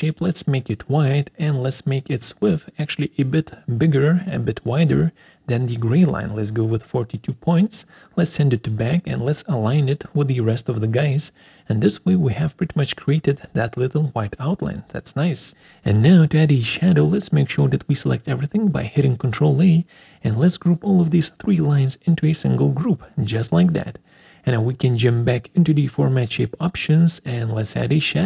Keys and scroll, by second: 5.8 Return, 11.0 ctrl+alt+Left, 11.3 ctrl+alt+Down, 16.6 ctrl+a, 23.7 ctrl+alt+Right, 24.0 ctrl+alt+Down, 27.4 alt+4.